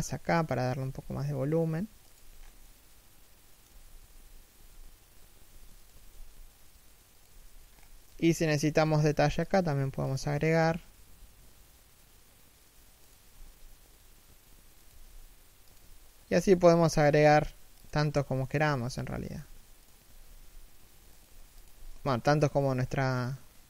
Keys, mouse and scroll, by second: 2.1 scroll down 1, 2.2 middle click, 3.3 3, 3.7 1, 5.5 alt+shift+right click, 5.7 g, 7.3-7.7 scroll up 1, 8.3 a, 15.6 a, 18.2 alt+right click, 18.5 s, 19.6 alt+right click, 20.0 s, 22.6 scroll down 1, 22.9 middle click.